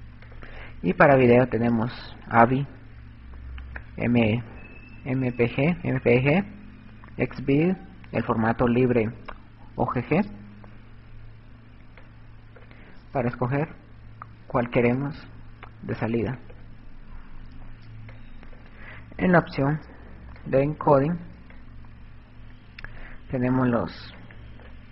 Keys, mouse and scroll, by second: 0.4 click, 12.2 click, 13.7 click, 18.2 click, 20.7 click, 21.8 click, 24.0 click.